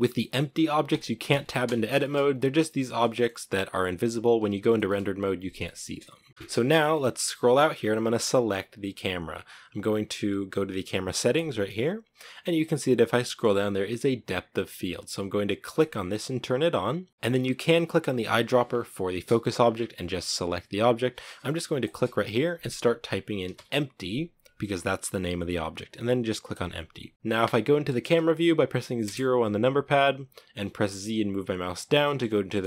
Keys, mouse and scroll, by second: 1.8-2.2 scroll up 2, 2.2 g, 2.8 middle click, 3.1-3.6 scroll down 1, 4.4 shift+middle click, 5.3 scroll up 1, 5.5 middle click, 6.3 scroll down 8, 6.6-7.1 middle drag, 7.1-8.2 scroll down 2, 8.2-15.5 right drag, 15.5-27.1 drag, 27.1 KP_0, 28.8 KP_0, 31.0 z, 31.5 scroll down 2, 31.7-32.6 shift+middle drag.